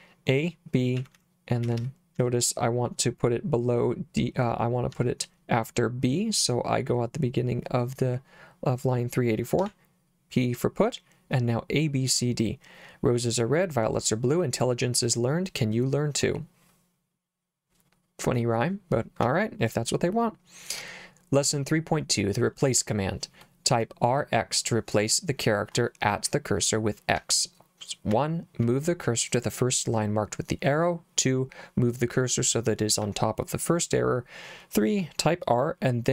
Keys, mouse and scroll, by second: 1.0-2.7 typing, 4.9 k, 9.6 p, 19.2 j, 22.8 k, 26.3 k, 27.2 j, 28.1 k, 33.0 j.